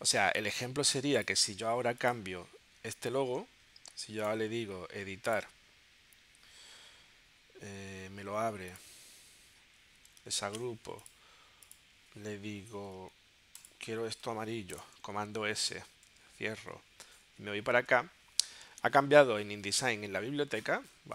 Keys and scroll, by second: 10.5 shift+super+g, 13.0 i, 14.3 v, 15.3 super+s, 16.6 super+w, 17.2 super+Tab.